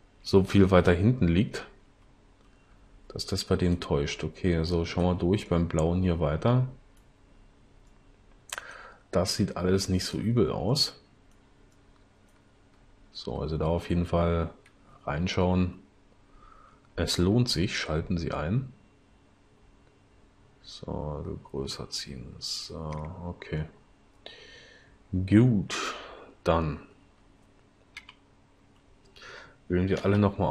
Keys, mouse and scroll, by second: 28.0 l, 30.0 a.